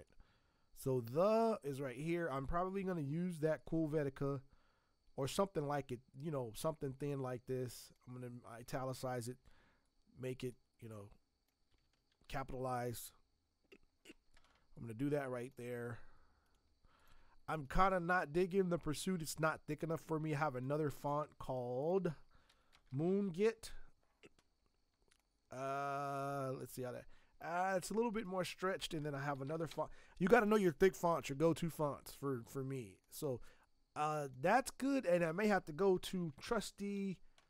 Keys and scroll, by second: 12.1 ctrl+t, 22.5-23.6 typing, 28.9-30.2 typing, 35.7-37.4 typing.